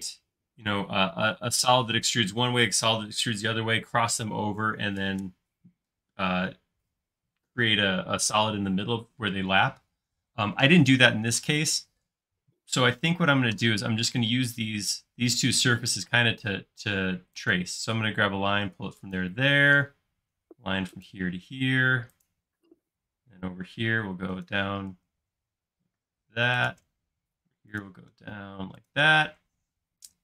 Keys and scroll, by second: 13.2 space, 14.1 l, 15.1 space, 16.1 l, 19.5 l, 22.8 space, 23.2 l, 25.1 typing, 27.0 typing, 29.4 typing.